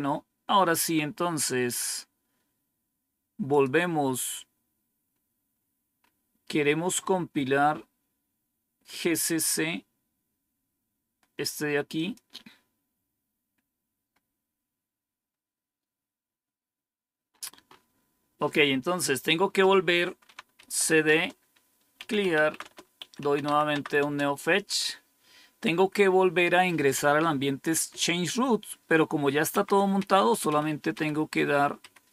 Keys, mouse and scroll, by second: 3.4 click, 4.9-6.8 scroll down 5, 7.8 scroll down 1, 11.8 click, 14.0 scroll up 2, 14.4 scroll down 2, 15.0-15.8 scroll down 4, 15.8-17.2 scroll down 1, 17.2-18.5 scroll up 2, 18.5-18.9 scroll up 1, 18.9 click, 20.5-24.4 typing, 21.0 Return, 29.4 Up, 29.9 Up, 30.4 Up, 30.8 Up, 31.7 Up.